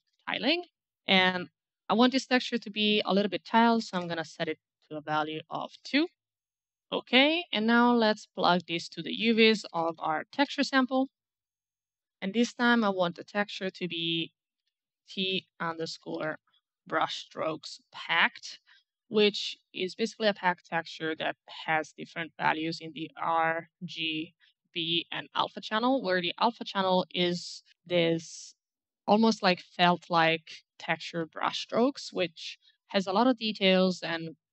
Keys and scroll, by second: 0.0-1.0 typing, 3.7 KP_2, 3.9 Return, 6.2 BackSpace, 6.3 g, 6.3 Return, 8.8-11.7 typing, 14.5-16.9 typing.